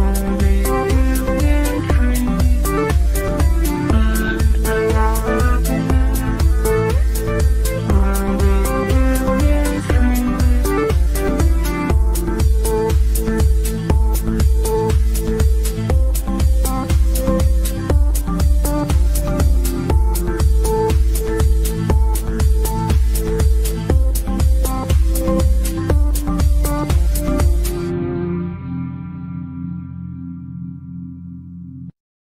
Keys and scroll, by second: 28.8 Escape, 30.3 Delete.